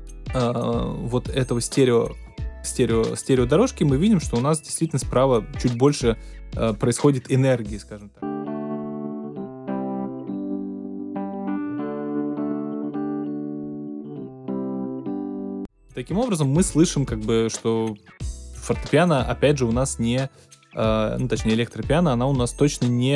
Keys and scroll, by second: 8.1 space, 15.5 space.